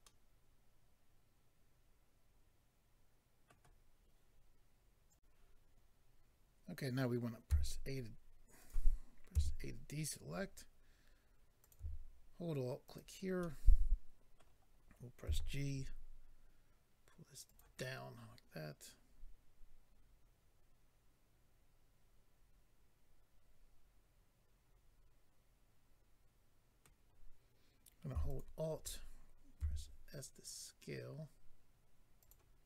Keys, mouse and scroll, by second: 0.0 middle click, 5.1 click, 8.6 click, 8.6 a, 9.3 a, 11.6 click, 12.8 alt+click, 13.4 middle click, 15.2 g, 17.4 click, 17.6 click, 17.8 middle click, 28.2 alt+click, 28.4 alt+click, 29.6 s, 32.2 click, 32.3 click.